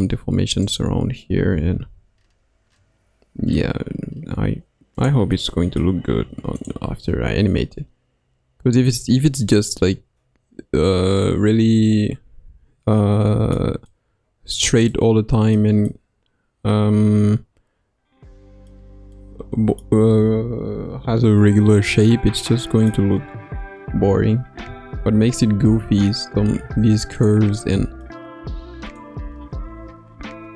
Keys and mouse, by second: 1.5 g, 5.6 middle click, 6.5 click, 11.2-14.7 middle drag, 14.9 middle click, 15.8-20.1 middle drag, 22.1 middle click, 23.9 g, 29.6 g.